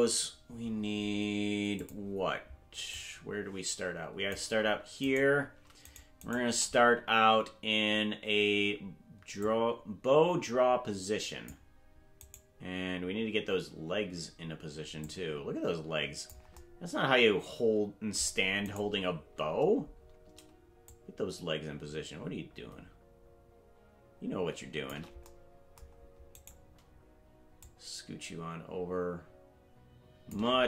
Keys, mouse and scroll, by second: 1.8 click, 3.0-4.4 drag, 5.1 right click, 5.9 shift+right click, 6.3 shift+right click, 9.4-11.5 drag, 12.3 right click, 15.0-16.4 drag, 18.7 right click, 19.9 scroll down 2, 20.8-24.9 shift+drag, 26.4 right click, 27.6-30.4 shift+drag.